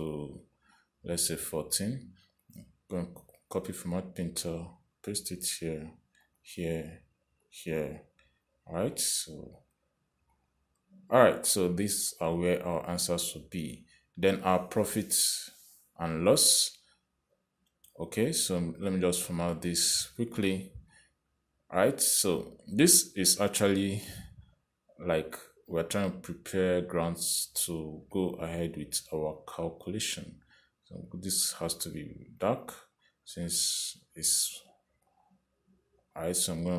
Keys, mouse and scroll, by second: 1.7 click, 3.7 click, 5.7 click, 7.5 click, 8.8 click, 10.3 click, 10.9 click, 11.6 click, 12.5 click, 19.0 Escape, 20.1 click, 22.2 click, 28.9 click, 32.3 click, 34.1 click, 36.3 click.